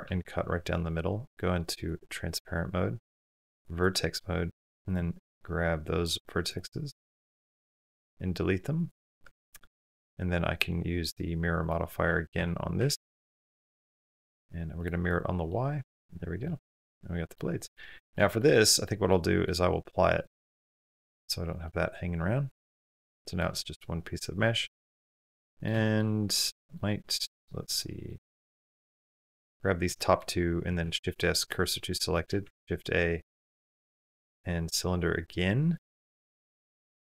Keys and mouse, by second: 1.7 click, 3.1 1, 3.4 click, 4.0 click, 5.3 click, 6.5 click, 7.5 x, 9.0 Tab, 15.3-15.8 middle drag, 16.2-17.2 middle drag, 17.6 middle click, 18.1 shift+middle click, 18.3-18.7 middle drag, 18.9-19.3 middle drag, 20.0 click, 20.8 middle click, 21.3 middle click, 22.7 click, 23.1 shift+middle click, 23.4 middle click, 24.2 Tab, 25.1 middle click, 25.7 shift+middle click, 26.3 middle click, 27.9 middle click, 29.7 shift+click, 30.6 shift+s, 31.9 shift+middle click, 32.2 shift+a, 34.7 s, 36.0 s.